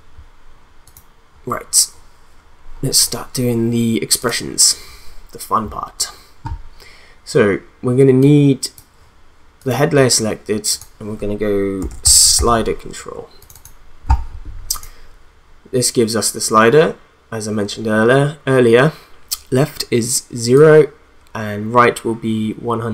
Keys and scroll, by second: 11.5-12.8 typing.